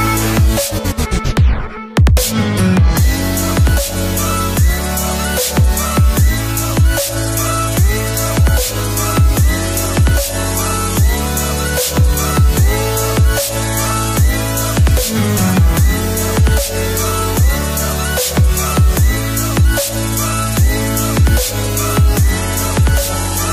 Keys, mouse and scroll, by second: 2.2 click, 8.6 click, 8.8-12.3 drag, 18.7 click, 21.0 click.